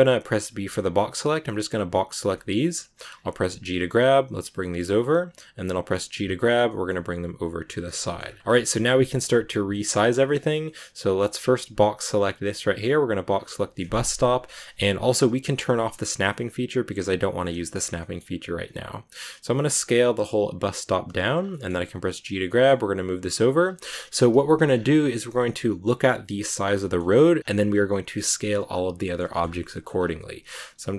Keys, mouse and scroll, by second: 0.3 b, 2.2-3.0 shift+scroll up 2, 2.2 shift+middle click, 3.0 scroll down 2, 3.5 g, 6.0 g, 7.7 scroll down 1, 7.8 a, 7.8 middle click, 8.1-8.7 scroll up 3, 8.4 shift+middle click, 8.7 scroll down 2, 9.0-11.4 shift+middle drag, 9.6 scroll up 1, 11.4 b, 13.5 shift+middle click, 13.7 scroll up 2, 17.0 click, 17.4 scroll up 1, 17.5 shift+middle click, 17.7 scroll down 2, 17.9 middle click, 18.5-19.4 scroll up 1, 19.4 s, 21.2 scroll down 2, 21.4 middle click, 21.9 g, 24.0 KP_Decimal, 24.6 scroll down 4, 24.9-26.9 shift+middle drag, 26.9 scroll up 1, 27.4 scroll down 2, 27.8 middle click, 28.6-28.9 scroll up 1, 28.9 middle click, 29.2-29.9 shift+scroll up 6, 29.2 shift+middle click, 29.6 middle click, 30.4 s.